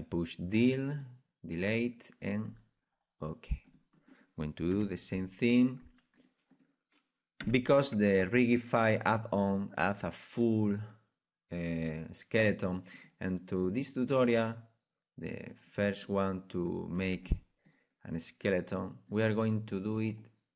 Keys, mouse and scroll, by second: 2.4 middle click, 2.9-3.6 scroll up 1, 3.6-4.9 drag, 3.9 right click, 4.7 KP_Decimal, 5.0 click, 5.0 right click, 5.3 middle click, 5.6 right click, 6.1-8.0 right drag, 7.4 c, 15.7-17.3 right drag, 16.4-17.6 drag, 17.0 c, 17.6 middle click, 19.8-20.5 right drag, 20.0 middle click.